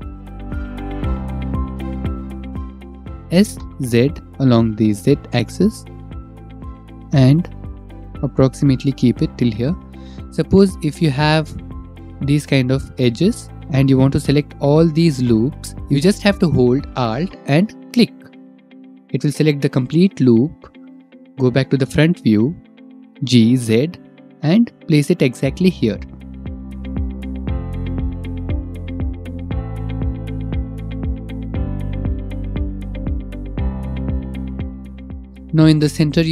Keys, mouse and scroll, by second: 0.4 click, 0.5 ctrl+r, 1.4 scroll up 1, 2.9 click, 2.9 click, 3.1 s, 3.4 Escape, 4.7 s, 8.2-9.8 drag, 11.9 click, 13.0 click, 13.4 click, 14.3 middle click, 15.9 middle click, 19.2 alt+click, 20.7 middle click, 22.4 click, 24.5 g, 24.9 z, 27.0 click, 28.8 ctrl+r, 31.8 click, 32.3 ctrl+r.